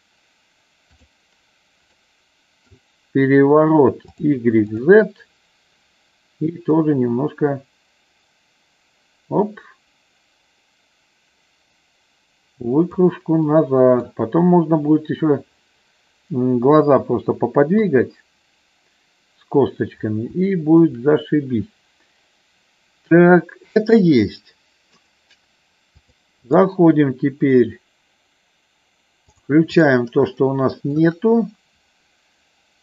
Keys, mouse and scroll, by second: 2.0 middle click, 4.1 click, 4.6 click, 6.9-13.0 drag, 13.5 middle click, 17.7 KP_1, 20.5 shift+middle click, 26.0 click, 30.3 shift+middle click.